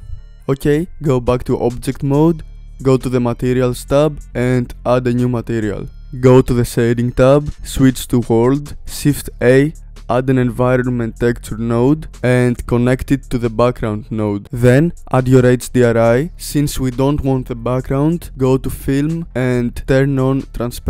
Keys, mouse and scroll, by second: 3.3 click, 4.7-5.9 drag, 6.8 click, 8.8-11.7 drag, 11.7 shift+a, 13.4-14.4 drag, 20.1 click.